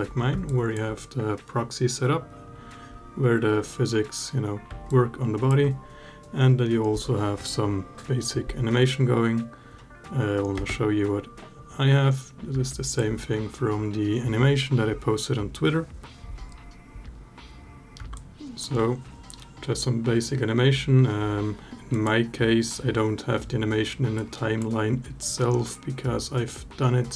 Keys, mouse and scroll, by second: 0.3 alt+drag, 4.7-5.3 alt+drag, 10.4 space, 12.5 alt+drag, 18.0-18.5 alt+drag, 20.9 space, 21.7 click, 24.0-24.4 drag.